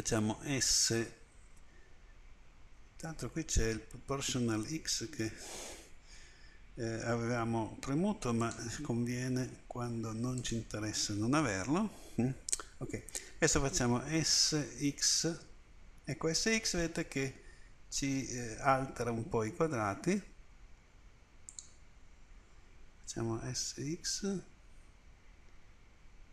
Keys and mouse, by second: 0.5 s, 8.4-14.2 drag, 14.2 s, 23.4 s.